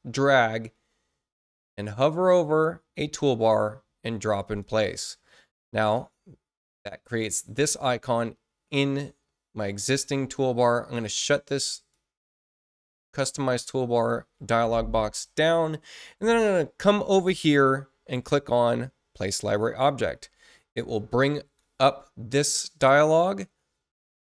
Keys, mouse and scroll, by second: 11.5 click, 19.4 click, 20.9 click, 22.7 click.